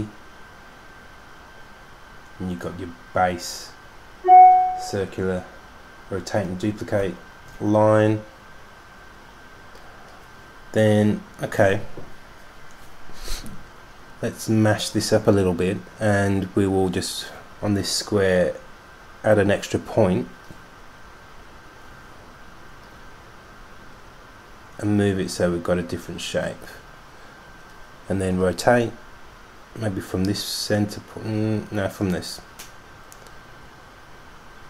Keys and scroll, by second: 0.1 super+d, 0.2 super+d, 0.4 super+d, 0.8 super+d, 1.0 super+d, 1.1 super+d, 1.4 super+d, 2.2 super+d, 2.6 super+d, 3.0 super+d, 3.6 super+d, 3.8 super+d, 4.4 super+d, 4.8 super+d, 7.3 super+d, 7.8 super+d, 8.4 super+d.